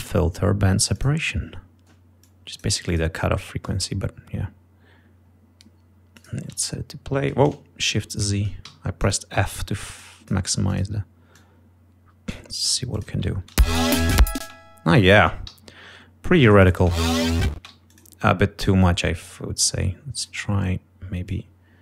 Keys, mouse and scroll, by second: 1.1 click, 2.3 click, 3.0 click, 6.3 click, 6.6 f, 7.9 shift+y, 9.1 click, 9.1 d, 10.1 click, 10.8 click, 11.5-12.7 drag, 13.1 click, 13.5 ctrl+scroll up 2, 13.7 ctrl+space, 14.6 space, 15.0 click, 15.6 g, 16.7 click, 16.9 space, 17.8 space, 17.9 d, 18.0 click, 18.8-20.6 drag, 21.4 click.